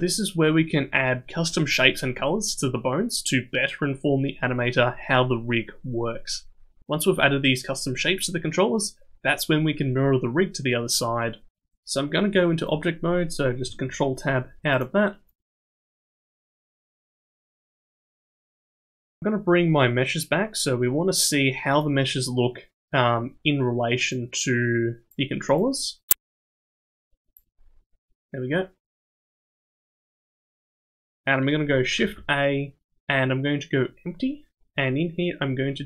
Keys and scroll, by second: 13.8 ctrl+Tab, 32.0 shift+a.